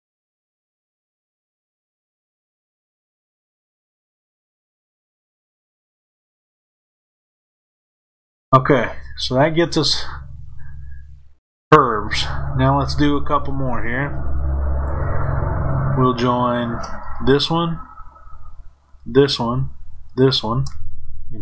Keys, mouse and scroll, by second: 1.3 shift+click, 2.6 f, 4.3 click, 6.3 shift+click, 7.7 f, 9.2-17.0 middle drag, 17.0 click, 18.8 shift+click, 19.9 shift+click, 21.3 f.